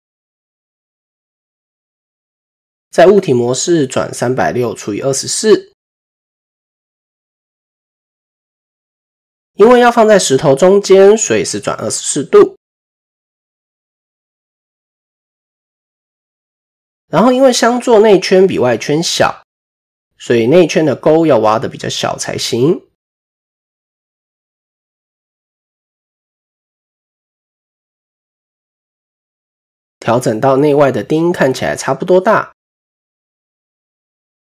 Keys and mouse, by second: 1.2 Tab, 5.3-8.3 drag, 11.2-11.8 shift+middle drag, 13.0 shift+middle click, 15.4 click, 19.9 click, 20.2 Tab, 20.7 shift+middle click, 21.2 click, 21.6 click, 22.2 s, 28.1 shift+click, 32.3 shift+middle click, 33.4 click, 34.3 s.